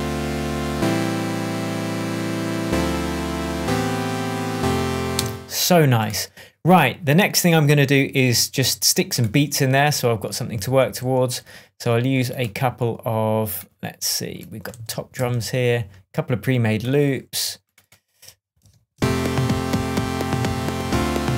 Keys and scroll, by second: 5.1 space, 10.7 shift+Down, 14.6 ctrl+Up, 15.1 ctrl+Right, 18.5 shift+Tab, 18.9 shift+space, 19.6 space.